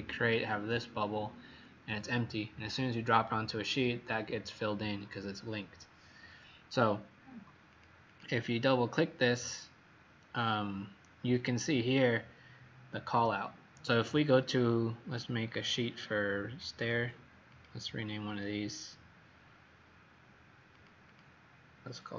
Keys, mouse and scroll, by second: 7.7 click, 8.0 click, 14.6 click, 21.0 click.